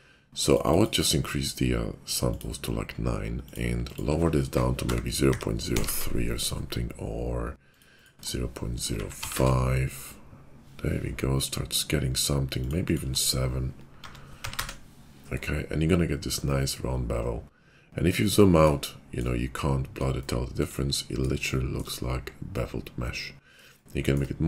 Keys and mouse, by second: 18.3-24.4 middle drag.